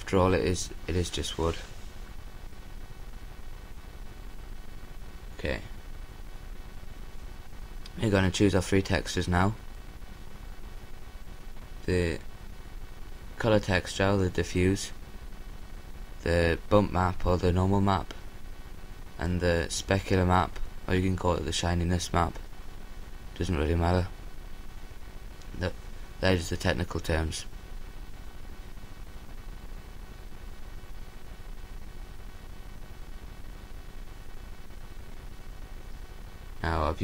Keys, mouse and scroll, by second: 6.6-10.7 drag, 28.3-34.1 drag.